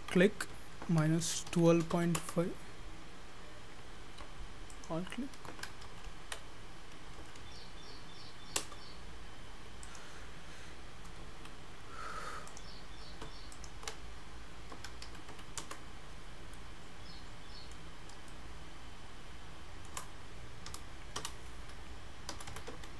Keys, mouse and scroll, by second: 4.8 alt+click, 9.9 click, 13.5 alt+click, 16.6 middle click, 18.2 scroll up 1, 18.3 shift+middle click, 20.7 g.